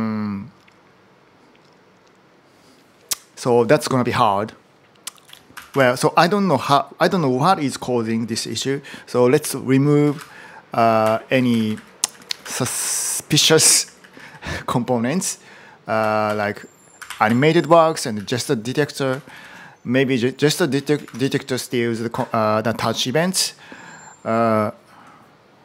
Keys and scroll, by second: 4.8-6.0 typing, 9.9-14.6 typing, 15.8-18.0 typing, 18.9 ctrl+r, 19.0 ctrl+r, 19.2 ctrl+r, 20.4-21.3 typing.